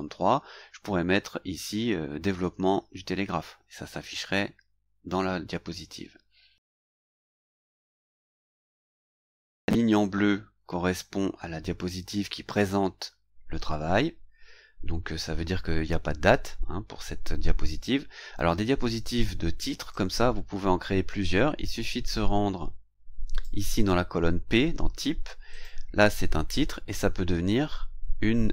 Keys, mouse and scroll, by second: 8.9 click, 19.9-23.6 drag, 25.5 click.